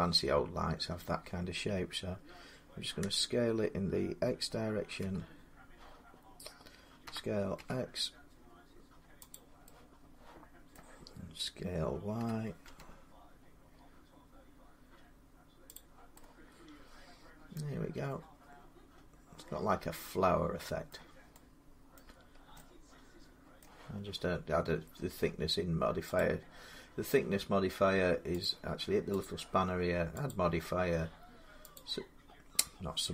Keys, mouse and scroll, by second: 2.8 a, 4.8 x, 6.9-7.4 typing, 9.1 click, 10.5 middle click, 12.0-13.0 typing, 15.6 click, 15.7-18.7 middle drag, 15.7 shift+y, 18.7-20.6 drag, 20.7 middle click, 21.8 middle click, 22.1 scroll down 2, 23.4 middle click, 26.0 click, 28.2 click, 29.0 click, 30.1 click, 31.6 click.